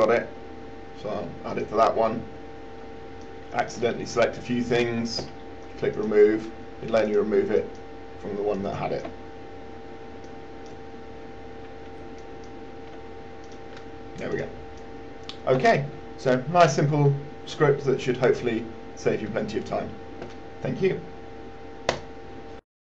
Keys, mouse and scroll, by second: 3.5 shift+click, 4.6-9.5 drag, 10.5 click, 12.5 shift+click, 13.7 click.